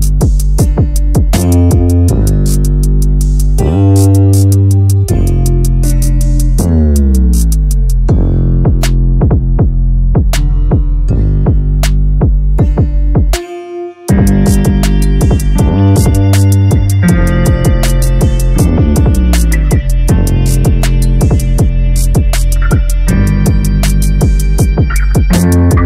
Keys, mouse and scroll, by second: 1.3 Tab, 1.6-2.4 scroll up 2, 2.4 3, 3.4 Tab, 3.8 a, 3.9 a, 4.3-5.0 middle drag, 5.0-5.3 scroll down 1, 5.3-7.1 middle drag, 7.1 KP_0, 8.0-8.9 scroll up 3, 11.2 a, 11.4 a, 12.9 shift+a, 15.1-15.6 scroll down 2, 15.6 s, 18.0 a, 18.2 a, 18.4-19.1 scroll up 4, 19.1-22.1 middle drag, 22.1 click, 22.7 KP_1, 23.4-24.4 scroll up 5, 24.4 g.